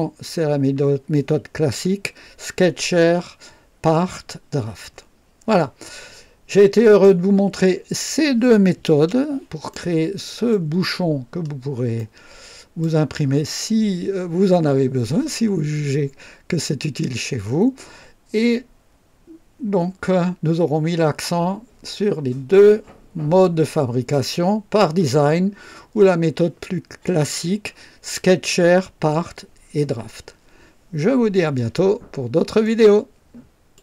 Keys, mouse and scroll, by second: 6.7 click, 8.8 KP_0, 8.9 KP_0, 9.6-10.6 right drag, 11.2-11.9 scroll up 1, 11.9-12.9 right drag, 32.5 right click, 33.7 click.